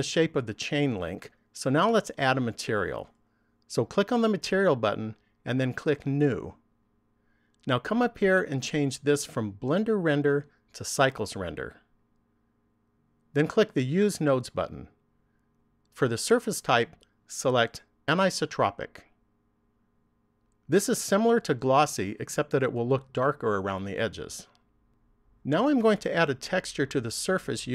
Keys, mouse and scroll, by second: 4.4 click, 6.3 click, 9.3 click, 15.4 click, 16.8 click.